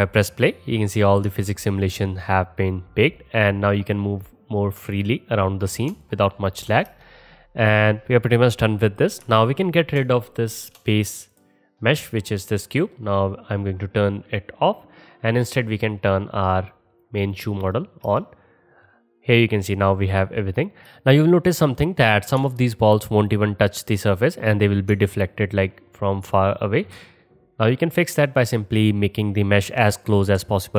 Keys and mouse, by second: 6.9 space, 8.9-11.4 drag, 11.4-13.2 middle drag, 13.2 click, 13.6 click, 16.1 click, 16.7 click, 17.0 click, 17.3 click, 17.7 click, 18.2 space, 20.8-30.7 alt+drag.